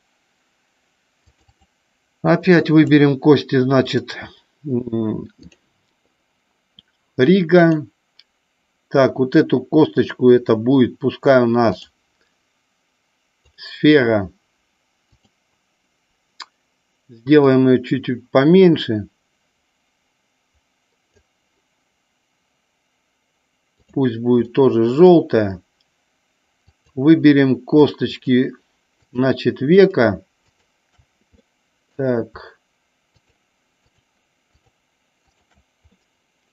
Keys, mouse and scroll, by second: 1.6 click, 2.6 click, 3.9-5.7 drag, 7.7 click, 11.9-13.8 drag, 15.3 click, 17.6-21.3 drag, 24.6 middle click, 26.8 click, 28.2 shift+click, 29.2 shift+click, 29.8 shift+click, 30.6 shift+click, 31.4 middle click, 33.3 shift+click, 33.9 shift+click, 34.6 shift+click, 35.4 shift+click, 36.1-36.5 middle drag.